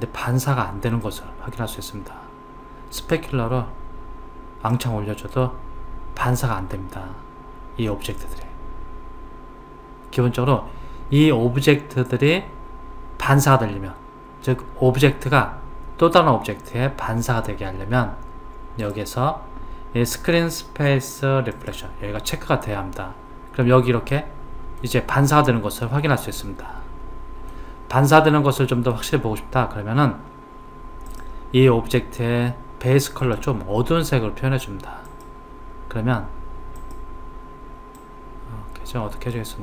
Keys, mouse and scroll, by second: 1.0-3.2 middle drag, 3.2 click, 18.8 click, 21.6 click, 24.2-31.1 middle drag, 31.1 click, 33.2 click.